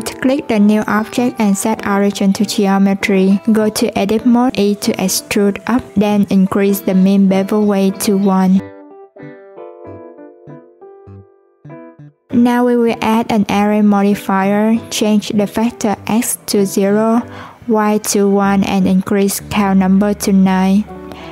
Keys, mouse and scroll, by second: 1.8 Tab, 2.2 a, 8.3-9.3 drag, 9.3 Tab, 11.3-16.0 drag, 16.2-17.3 drag, 18.0 click, 19.3-20.6 drag.